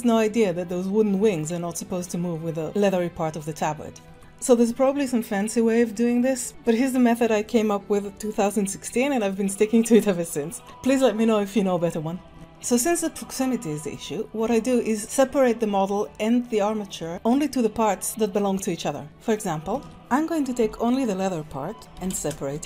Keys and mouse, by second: 10.6 middle click, 12.7-13.9 middle drag, 18.9 middle click, 19.0 Tab, 19.3 click, 19.7 ctrl+Tab, 20.0 alt+a, 20.6 l, 21.9 p, 22.5 Tab.